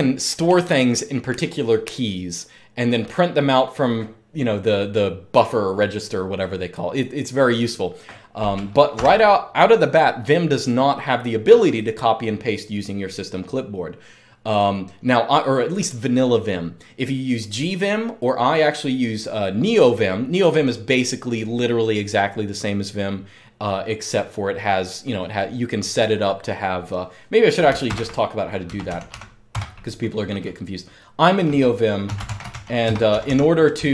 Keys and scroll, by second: 8.7 m, 27.6 super+Return, 28.2-29.4 typing, 31.6-33.7 typing.